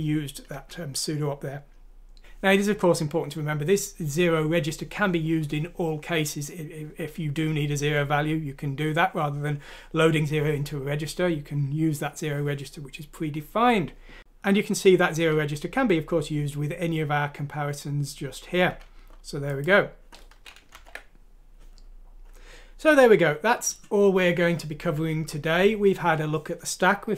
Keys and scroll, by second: 20.7 ctrl+Home.